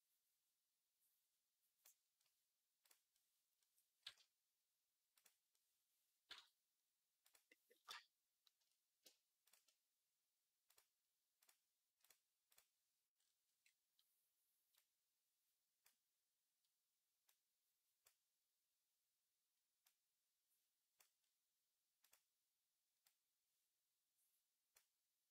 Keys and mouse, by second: 5.0 click, 5.1-7.1 middle drag, 7.1 click, 7.7-10.5 shift+middle drag, 10.5-11.9 drag, 11.9 middle click, 12.3 click, 12.4-14.6 middle drag, 14.6-22.0 drag, 22.0-25.3 middle drag.